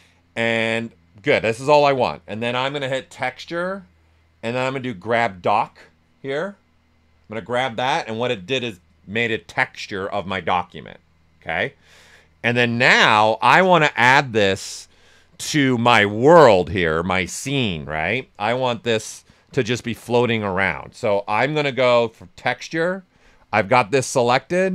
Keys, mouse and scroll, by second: 7.3 ctrl+click, 18.1 ctrl+click, 20.5 d.